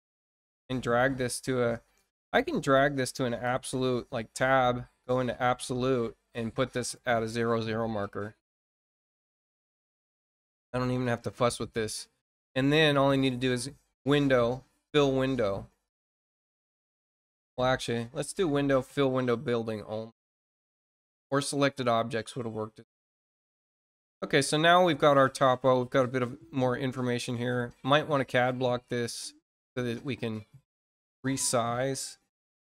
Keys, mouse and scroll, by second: 2.8-3.9 drag, 5.0 click, 6.5 click, 8.3 click, 9.5 click, 13.1 click, 15.8 click, 18.0 click, 20.7 click, 22.3 middle click, 23.1 middle click, 24.3-24.6 scroll up 1, 25.1-26.4 scroll down 3, 28.4 click, 29.8 scroll down 1, 30.5 middle click, 31.0-32.0 scroll down 3.